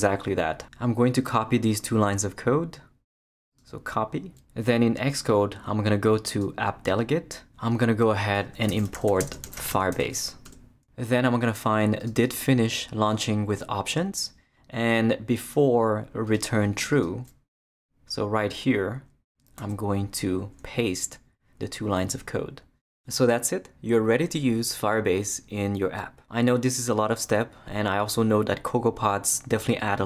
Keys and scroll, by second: 8.0 Return, 8.3-10.5 typing, 17.7 Return, 19.6 super+v.